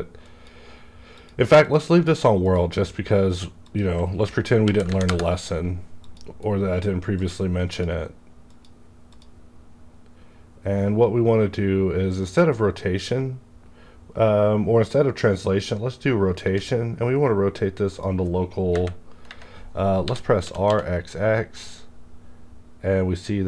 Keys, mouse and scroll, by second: 4.6 KP_Decimal, 4.9 KP_3, 5.1 KP_Enter, 6.0 click, 6.4-7.1 scroll down 1, 7.1 click, 7.6 click, 9.5 scroll down 1, 12.2 click, 15.7-18.7 drag, 18.7 KP_3, 20.0 r, 20.4 r, 20.4 KP_3, 20.7 x.